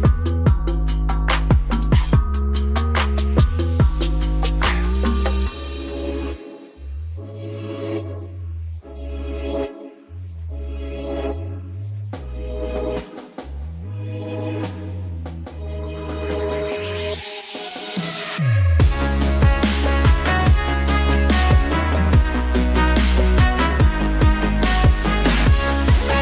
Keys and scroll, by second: 4.9 alt+space, 20.2 Return, 23.4 ctrl+alt+z, 24.0 space.